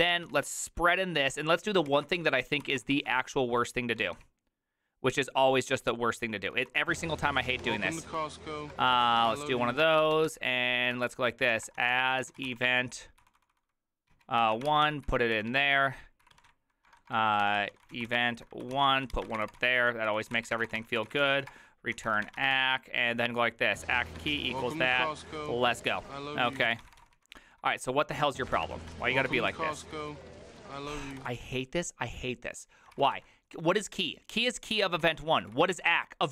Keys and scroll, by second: 0.0-0.4 typing, 1.6-3.3 typing, 4.0 ctrl+n, 4.0 ctrl+p, 4.2 ctrl+p, 6.4 ctrl+n, 6.8 ctrl+n, 6.8 ctrl+y, 7.6 Tab, 7.9 Return, 8.1-13.9 typing, 14.1 ctrl+p, 14.4 ctrl+y, 14.7 ctrl+c, 14.9-31.2 typing, 18.7 ctrl+n, 18.8 ctrl+y, 23.9 Tab, 32.7-33.5 typing, 34.9-36.3 typing.